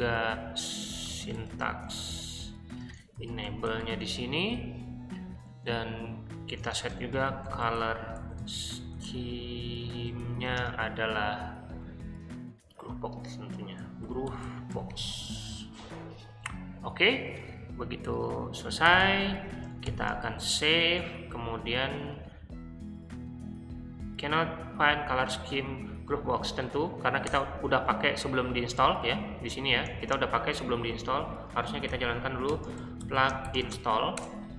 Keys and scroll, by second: 0.0-4.3 typing, 5.4 Return, 6.5-10.5 typing, 13.5-15.4 typing, 18.8-20.6 typing, 20.8 Return, 27.2 Return, 28.0-30.0 typing, 30.9 Escape, 31.6-34.1 typing.